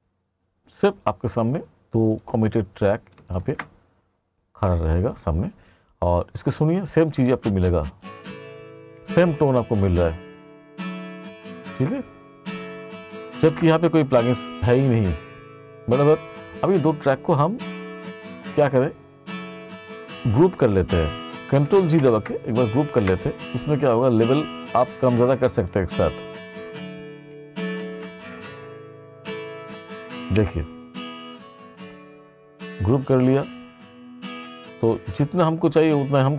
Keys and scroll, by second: 7.2 space, 14.0 ctrl+=, 22.1 ctrl+g, 23.1 Return, 28.5 ctrl+shift+g.